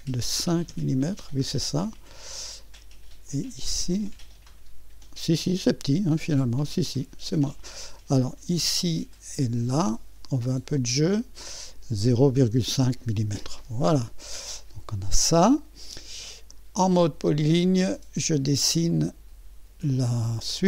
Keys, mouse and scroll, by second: 0.7 Return, 3.3-6.1 drag, 6.5-9.7 drag, 11.1 click, 11.8-13.0 typing, 14.6-16.0 drag, 16.0-17.2 middle drag, 17.2 click, 18.9 click.